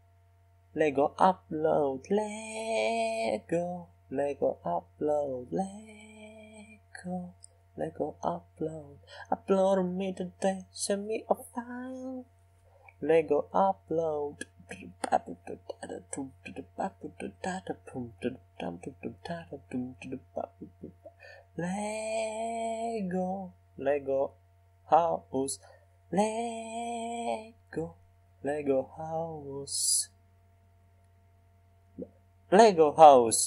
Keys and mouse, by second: 1.3 s, 2.1-5.8 middle drag, 5.3 g, 6.2 middle click, 11.1-15.2 drag, 12.9 g, 16.0 s, 18.1-21.1 drag, 21.1-22.2 middle drag, 23.4 s, 28.0-29.5 middle drag, 29.5-32.7 drag, 30.8 s.